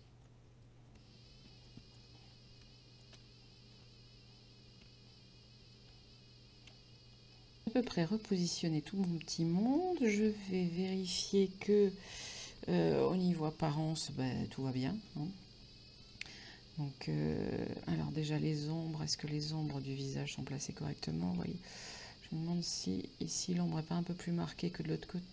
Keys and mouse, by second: 0.0-3.8 typing, 0.2 shift+click, 0.6 right click, 1.0 click, 1.3 right click, 1.6 click, 1.9 click, 2.0 middle click, 2.5 click, 3.0 click, 3.7 shift+click, 4.5 shift+click, 4.8 s, 5.7 shift+click, 5.8 g, 6.5 shift+click, 6.7 s, 7.1 shift+click, 7.3 g, 7.8 click, 9.1 middle click, 10.3 Tab, 14.5 middle click, 18.1 middle click, 19.8 middle click, 21.5 shift+middle click, 22.2 middle click, 24.7 middle click.